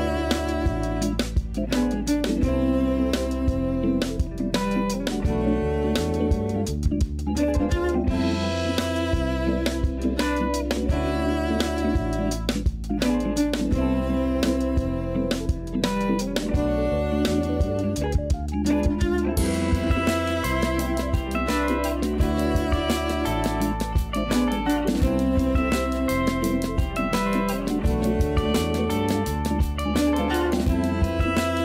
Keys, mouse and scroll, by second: 1.5-1.9 scroll up 1, 2.0 a, 3.1 s, 5.8 a, 6.0 a, 6.2 middle click, 6.6-7.2 scroll up 2, 7.4-8.3 scroll down 1, 8.3-9.0 scroll down 2, 9.0 l, 10.4 s, 15.0 Tab, 15.4 a, 15.6 a, 15.7-17.7 middle drag, 17.7 scroll up 1, 18.0 scroll down 3, 18.4-19.6 shift+middle drag, 19.6 Tab, 20.2 a, 20.6 Tab, 21.2 click, 22.0 KP_1, 25.5-26.8 drag, 29.1 click.